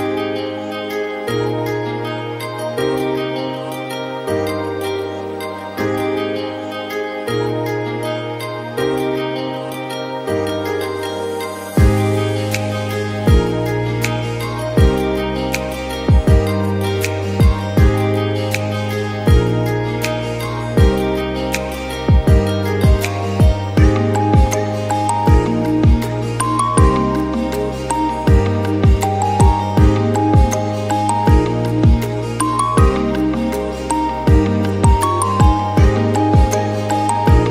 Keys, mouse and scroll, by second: 0.6 ctrl+p, 1.7-2.4 scroll down 17, 2.4-2.8 middle drag, 2.8-3.4 scroll up 14, 3.4-4.6 shift+middle drag, 4.6 click, 4.9-5.5 scroll up 4, 5.5 shift+click, 6.3 ctrl+p, 7.4 click, 8.6 click, 8.9 shift+drag, 9.7-10.5 drag, 10.5-11.3 scroll down 10, 11.3-14.0 drag, 14.0-14.7 scroll up 9, 14.7 click, 15.0-15.8 scroll up 1, 15.8-16.6 drag, 17.2 click, 17.6 click, 18.2 shift+click, 18.9 ctrl+p, 20.0 click, 21.6 click, 22.0-22.9 scroll down 10, 22.9 g, 27.4-28.6 shift+middle drag, 28.6-29.1 scroll up 8, 29.2 click, 29.8 shift+drag, 30.5 ctrl+p, 31.9 drag, 32.4 click, 32.8 click, 33.2 shift+click, 34.0-35.1 drag, 35.1-35.9 scroll down 19, 36.4-37.5 drag.